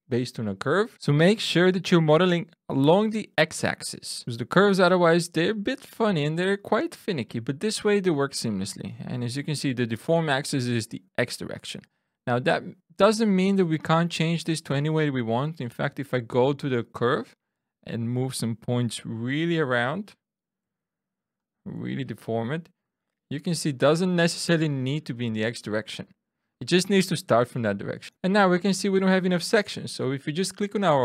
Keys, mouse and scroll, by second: 0.9 alt+shift+super+u, 6.5 click, 7.4 click, 13.1 click, 14.2 click, 15.5 Tab, 17.0 click, 19.0 g, 20.0 click, 20.6 r, 21.3 click, 21.7 g, 22.8 click, 23.6 click, 24.1 g, 25.0 click, 25.8-26.5 scroll up 2, 26.5 middle click, 27.8 scroll down 3, 28.1 scroll up 3, 29.8 click.